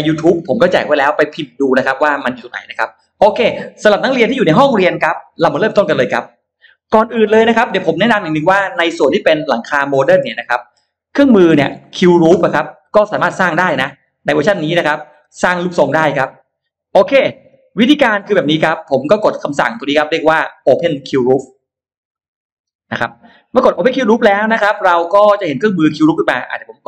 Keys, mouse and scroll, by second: 9.0 click, 9.9 scroll up 1, 10.1 scroll down 1, 10.3 middle click, 11.2 scroll up 2, 11.6 middle click, 11.9 scroll down 2, 12.5 middle click, 16.0 click, 16.9-18.2 drag, 21.4 click, 25.0 click, 26.2 click.